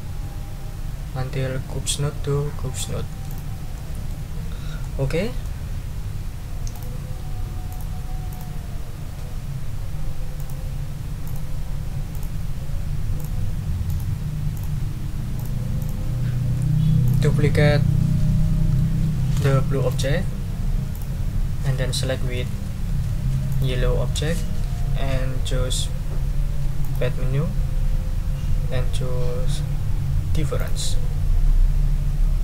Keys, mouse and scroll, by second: 3.3 click, 3.7 click, 4.8 click, 6.7 click, 7.7 click, 8.3 click, 10.4 click, 11.2 click, 12.1 click, 13.2 click, 13.9 click, 14.5 click, 15.4 click, 15.8 click, 17.0 click, 19.9 right click, 20.9 click, 23.5 shift+click, 26.8 click, 30.6 click.